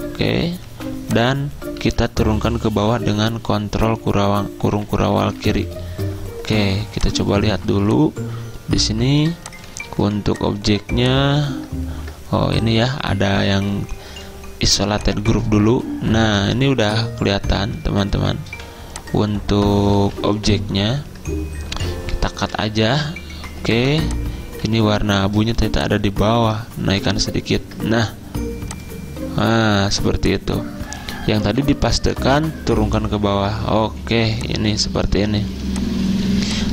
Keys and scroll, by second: 0.7 v, 1.9 ctrl+z, 3.9 ctrl+[, 4.1 ctrl+[, 4.7 ctrl+[, 5.5 ctrl+[, 7.7 z, 10.1 v, 11.9 ctrl+z, 13.0 z, 16.7 typing, 18.6 v, 20.1 ctrl+z, 21.8 ctrl+x, 22.9 Escape, 23.9 z, 25.5 v, 27.1 ctrl+], 31.5 ctrl+f, 32.9 ctrl+[, 33.9 z, 35.7 space.